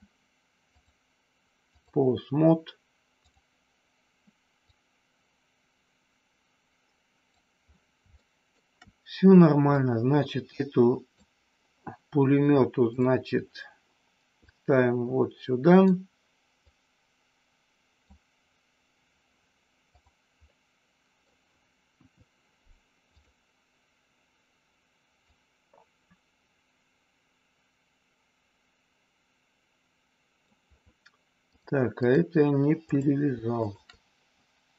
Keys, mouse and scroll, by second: 0.6-1.8 drag, 3.2 click, 4.6-7.3 drag, 8.2 shift+middle click, 9.6-11.0 drag, 12.9 click, 14.4-15.9 drag, 16.6-18.0 drag, 20.5 middle click, 21.2 scroll down 1, 21.9 KP_1, 23.0 click, 25.2-30.4 drag, 31.5 click, 33.6 shift+click.